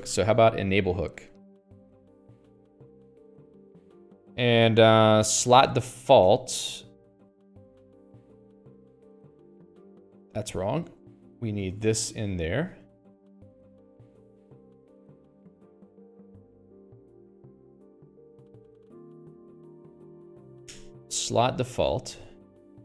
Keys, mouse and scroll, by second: 0.0-3.9 typing, 5.5 ctrl+s, 5.8 Escape, 5.9 l, 7.6 l, 10.5-22.8 typing, 13.1 Escape, 15.9 Escape, 18.4 Return, 18.7 Escape.